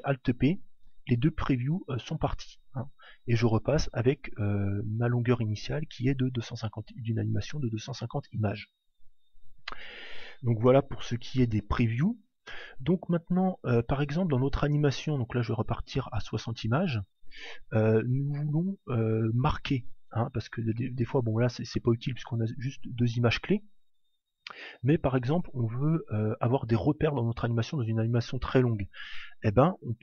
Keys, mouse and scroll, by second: 0.4 alt+p, 14.1-17.3 drag, 17.7 click.